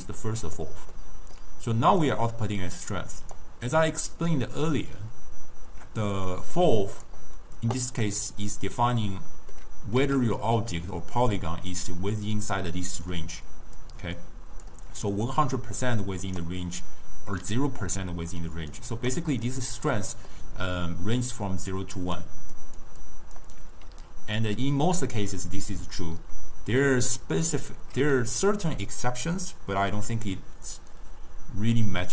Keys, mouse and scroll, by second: 0.1-2.1 middle drag, 2.1 click, 4.4 drag, 8.2 click, 8.7-10.1 middle drag, 10.1 s, 12.8-13.4 middle drag, 13.4 d, 13.9 click, 14.7 d, 15.2-16.5 right drag, 16.5-18.6 d, 17.5 click, 18.0 d, 18.8 right click, 19.2 d, 20.2 middle click, 20.5-23.7 typing, 20.9 click, 22.1 click, 22.7 click, 23.1 click.